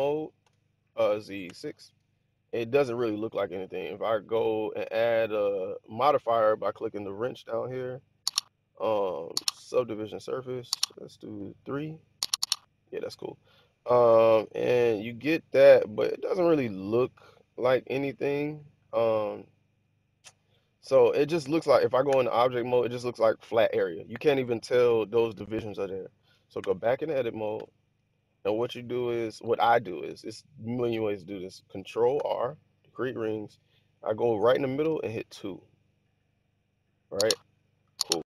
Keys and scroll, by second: 0.3 4, 1.0 z, 1.3 6, 21.9 Tab, 26.5 Tab, 27.4 1, 32.0 ctrl+r, 34.7 2.